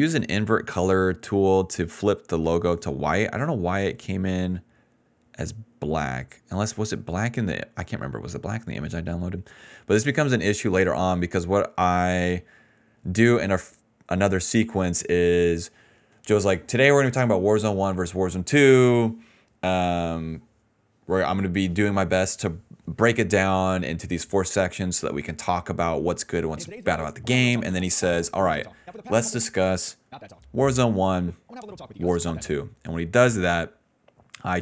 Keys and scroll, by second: 20.9 s, 21.1 s, 26.3 ctrl+s, 26.4 space, 26.7 d, 27.2 d, 29.3-32.3 typing, 34.1 s.